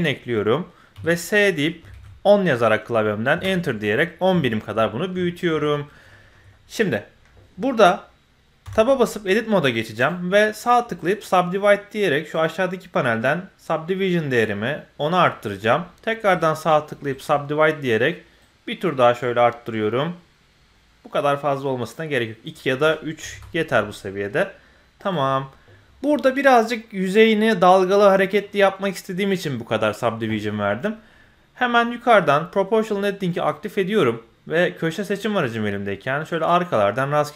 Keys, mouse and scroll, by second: 0.1-0.9 scroll down 1, 0.9 s, 4.2 scroll down 1, 4.4 shift+middle drag, 4.8 middle click, 5.2 shift+middle drag, 5.9 scroll up 1, 6.1 shift+middle click, 6.5 middle click, 8.6 Tab, 10.0 right click, 12.4 right click, 12.4 click, 13.6-15.2 drag, 16.3-18.4 right drag, 18.4-22.1 drag, 22.4 click, 25.0 click, 33.3 click, 35.1 click, 36.3 click.